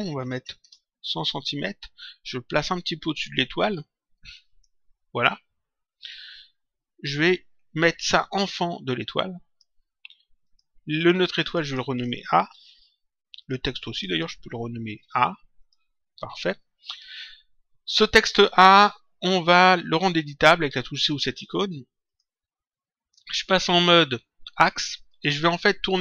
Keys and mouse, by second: 0.5 Return, 2.7 click, 8.3 click, 10.4 click, 12.5 shift+a, 13.3 click, 14.8 shift+a, 15.5 click, 17.8 click, 22.0 click, 25.0 click.